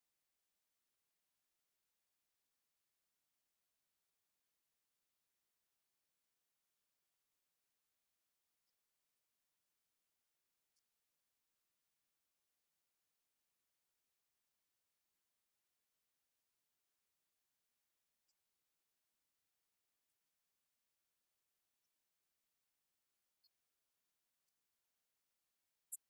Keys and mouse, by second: 5.5-10.0 drag, 18.8 click, 24.8 click, 25.4 click.